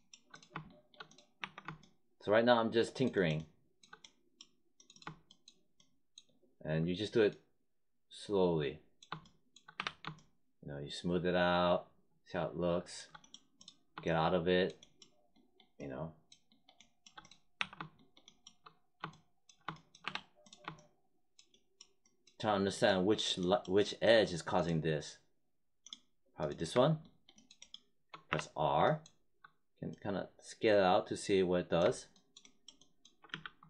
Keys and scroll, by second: 1.3 1, 9.7 3, 17.5 1, 20.0 3, 28.2 r, 33.2 z.